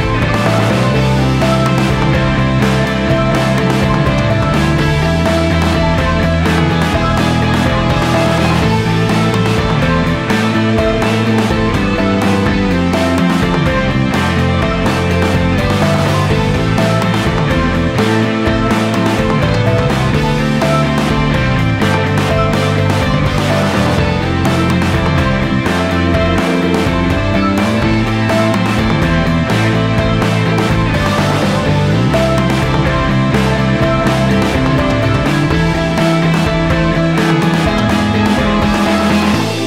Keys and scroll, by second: 1.6 v, 1.8 space, 2.0 a, 5.6 space, 6.0 ctrl+c, 6.8 space, 7.1 space, 7.7 v, 14.4 ctrl+z, 18.6-20.9 typing, 22.1-24.1 typing, 26.2 space, 30.1-32.8 typing, 30.9 Delete, 36.6 space, 37.1 space, 37.2 a, 38.3-39.6 typing.